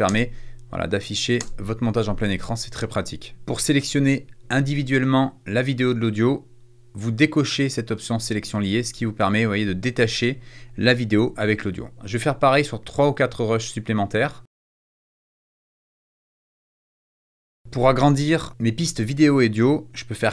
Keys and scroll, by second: 0.0 space, 1.4 space, 1.9 Escape, 14.6 space, 15.5 space, 16.8 space.